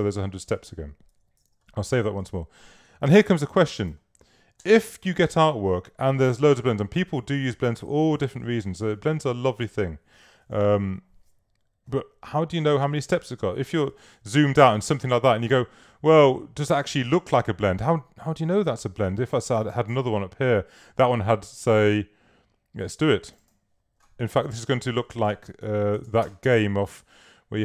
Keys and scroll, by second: 1.5 super+s, 3.2 v, 14.1 super+-, 25.8-26.6 typing.